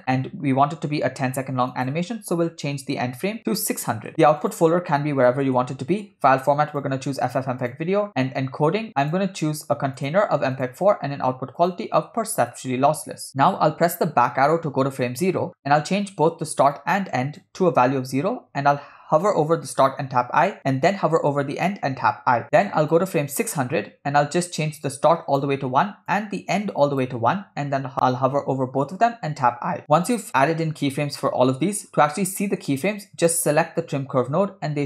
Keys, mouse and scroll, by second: 0.0-0.8 scroll down 1, 0.8 scroll down 1, 1.7-4.1 drag, 4.1 0, 4.4-5.5 drag, 5.5 /, 6.7-7.8 drag, 8.1-8.8 scroll down 2, 9.0 click, 10.0-10.7 drag, 11.6-12.7 drag, 13.4 middle click, 13.4 scroll down 4, 15.0 Left, 16.1 scroll up 3, 16.8 click, 19.8 1, 21.9 1, 22.9 click, 24.6 click, 26.1-27.1 drag, 28.8 1, 29.6 1, 31.9 scroll down 2, 32.1 middle click, 33.4 click.